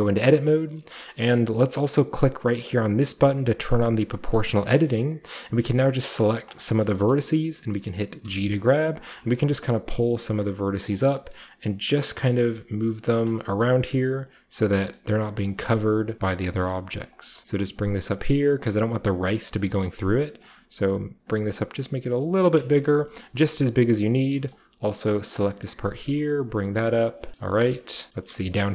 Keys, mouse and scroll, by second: 0.9-3.1 middle drag, 0.9-3.1 scroll up 1, 3.7 click, 4.3-6.8 shift+middle drag, 6.8 right click, 7.4 middle click, 7.4-8.9 scroll up 1, 7.6 shift+middle click, 8.9 middle click, 8.9-9.5 scroll down 1, 9.0 middle click, 9.5 click, 10.8 scroll down 1, 10.8 g, 10.8 click, 12.5 g, 12.7-14.6 scroll down 1, 13.8-14.2 typing, 14.6 click, 15.8-18.7 typing, 16.9-21.3 scroll up 1, 17.1 click, 18.1-19.7 drag, 19.3 middle click, 19.7 typing, 20.4-22.5 drag, 21.3-22.1 scroll up 1, 22.3-23.1 scroll down 1, 23.1-25.3 shift+scroll up 1, 23.2-25.4 shift+middle drag, 25.3 shift+scroll up 1, 25.4-26.0 typing, 27.1 click, 27.3-28.7 middle drag, 28.4-28.7 scroll up 1.